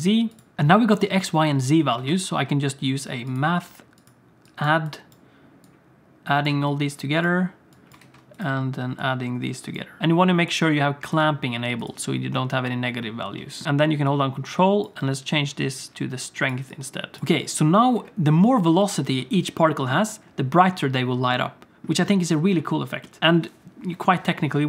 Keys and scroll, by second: 2.1 shift+a, 8.1 shift+d, 17.2 space, 17.9 space, 18.8 space.